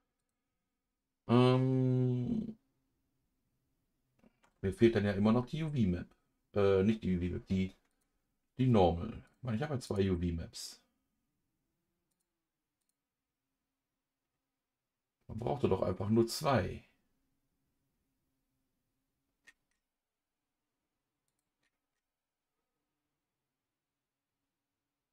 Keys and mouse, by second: 0.2 click, 8.0-10.0 drag, 12.3 click.